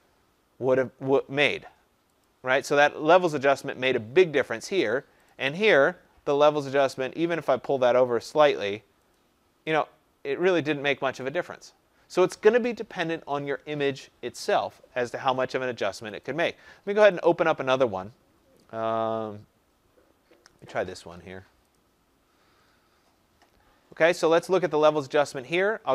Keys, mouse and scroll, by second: 2.2 click, 2.8 click, 5.3 click, 8.2 click, 9.1 click, 9.8 click, 11.2 click, 16.2 click, 17.2 click, 20.7 click, 21.7 click.